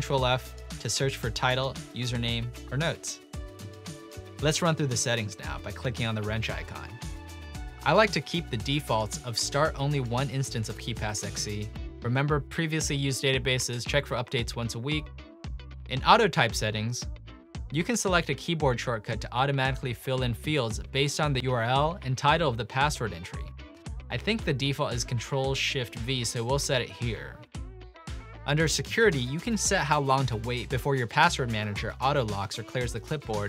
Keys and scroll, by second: 0.0-1.1 typing, 2.7 typing, 14.0 typing, 26.2 ctrl+shift+v.